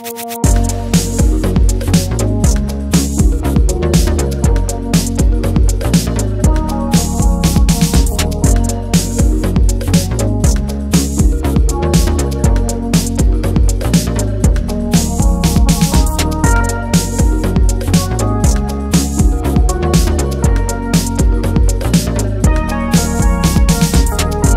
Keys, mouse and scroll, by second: 1.1 scroll up 1, 1.3-15.3 drag, 15.4-16.6 typing, 16.8 Return, 20.3-22.4 drag, 22.6 click.